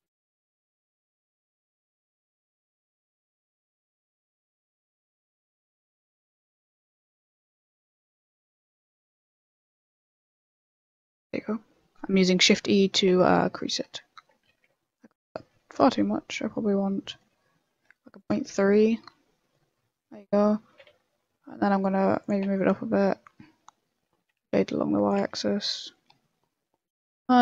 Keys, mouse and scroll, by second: 0.1 middle click, 0.7 KP_1, 1.6 b, 2.6 click, 3.0 click, 3.7 click, 3.8 b, 5.1 middle click, 5.7 s, 6.7 click, 7.6 click, 8.0 middle click, 8.2 s, 9.4 s, 10.2 shift+e, 12.9 middle click, 13.1 Tab, 13.3 middle click, 13.8 Tab, 14.7 ctrl+z, 15.1 ctrl+z, 15.3 ctrl+z, 15.8 shift+e, 18.3 Tab, 18.7 middle click, 19.2 middle click, 19.7 Tab, 20.7 g, 22.4 Tab, 22.5 middle click, 23.5 middle click, 24.0 Tab, 24.2 r, 25.2 Tab, 25.6 middle click, 25.8 scroll down 4, 26.1 middle click.